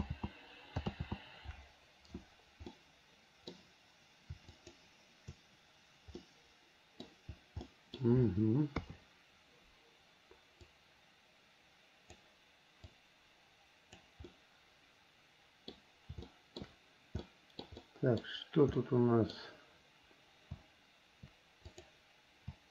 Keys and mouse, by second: 0.2 ctrl+z, 1.1 ctrl+z, 2.9 middle click, 6.4 middle click, 7.8 middle click, 8.9 KP_3, 10.9-12.4 drag, 13.1-14.2 drag, 14.5-15.9 middle drag, 16.4 shift+middle click, 17.5 middle click, 18.0 middle click, 19.0 middle click, 21.9 click.